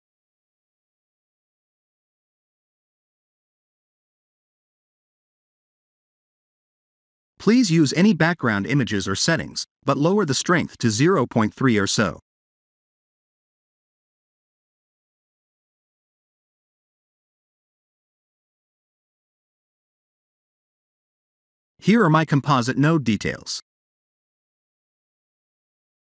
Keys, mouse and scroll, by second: 0.3 click, 2.8-3.3 scroll down 4, 3.7 click, 4.7 middle click, 6.8 click, 12.4 KP_0, 14.1 click, 15.2-15.9 scroll up 5, 17.4 scroll down 1.